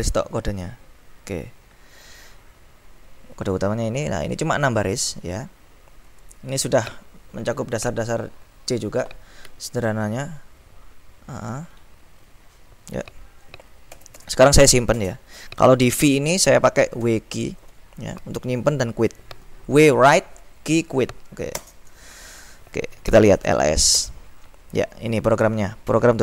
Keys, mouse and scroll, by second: 10.5-11.2 ctrl+scroll up 2, 11.2-11.7 ctrl+scroll up 1, 11.7-13.0 ctrl+scroll up 1, 13.9 Escape, 15.1 shift+;, 17.1 w, 17.4 q, 21.7 Return, 23.1-24.0 typing.